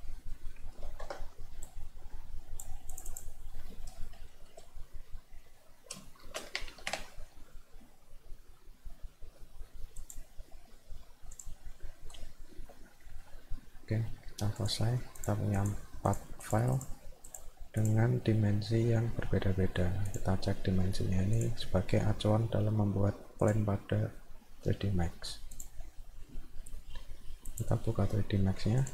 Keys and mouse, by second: 1.7-2.7 drag, 2.9 click, 3.1 click, 10.0 click, 11.3 click, 14.6 click, 15.2 click, 15.6 click, 16.1 click, 16.4 click, 16.8 click, 17.3 click, 17.8 click, 20.1 click, 21.4 click, 23.4 click, 25.5 click, 27.5 click, 28.8 click.